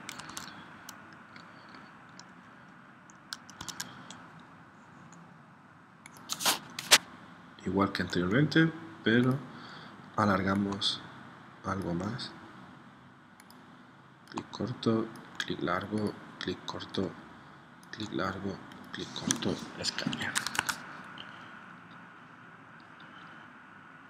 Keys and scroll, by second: 0.3 super+Tab, 3.6 super+Tab, 20.2 Escape, 20.6 super+Tab.